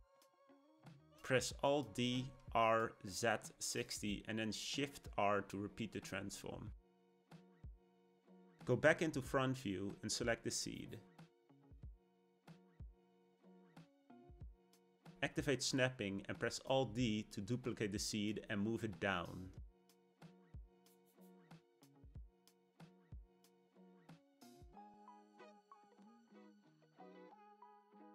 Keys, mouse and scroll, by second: 0.2 alt+d, 4.8 shift+r, 5.2 shift+r, 5.5 shift+r, 5.9 shift+r, 6.4-9.5 middle drag, 10.0 KP_1, 12.4 click, 13.5-15.9 scroll up 1, 15.9 click, 18.1 alt+d, 25.4-26.8 middle drag, 26.8 shift+Tab, 27.8-28.1 shift+middle drag.